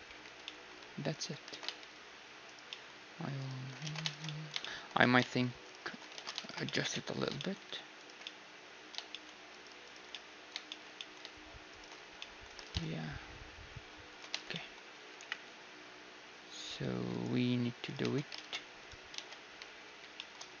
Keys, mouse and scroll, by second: 0.2 Tab, 1.1-3.1 right drag, 1.5 alt+s, 3.1 middle click, 3.8 ctrl+z, 5.0 right click, 6.1 ctrl+z, 10.1 click, 10.1-14.1 right drag, 12.6 alt+s, 14.3 Tab, 14.3-17.0 middle drag, 15.2 KP_1, 17.0 1, 17.5-19.1 drag, 17.8-19.7 right drag, 18.0 Tab, 19.1 z, 19.8 shift+2, 20.1-20.6 middle drag.